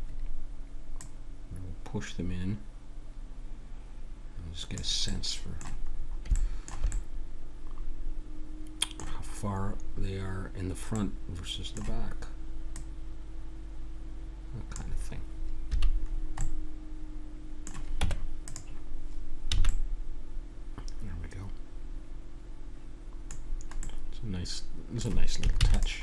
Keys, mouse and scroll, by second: 1.0-2.8 drag, 5.1-8.7 middle drag, 9.9-12.7 middle drag, 12.7-14.5 drag, 15.7 a, 16.1-18.0 middle drag, 18.0 Tab, 19.5 a, 19.7 middle click, 21.5-22.8 middle drag, 23.4-25.5 middle drag, 25.5 ctrl+s.